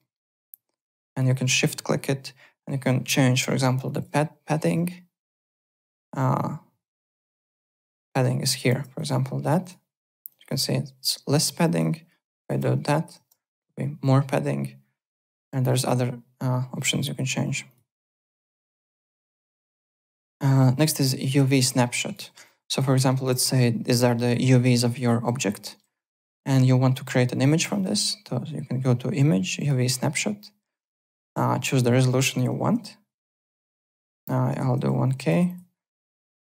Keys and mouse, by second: 0.2 alt+right click, 1.1 shift+click, 3.8 click, 8.1 click, 8.7 KP_1, 8.7 KP_0, 8.9 click, 9.6 click, 10.3 click, 11.6 click, 12.4 KP_8, 13.1 KP_Enter, 13.5 click, 17.6 click, 18.1 alt+Tab, 18.4 alt+click, 20.5 alt+Tab, 20.9-22.3 typing, 21.0 alt+click, 21.3 click, 21.9 click, 22.9 alt+middle click, 23.1 alt+right click, 24.8 alt+right click, 27.7 click, 29.5 click, 33.6 click, 34.1-35.3 typing, 35.4 click, 36.3 click.